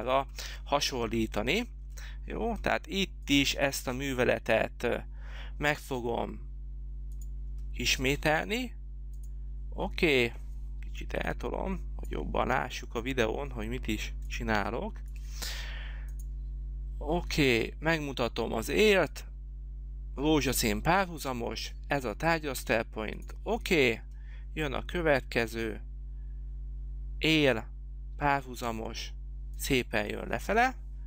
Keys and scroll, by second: 10.9 h.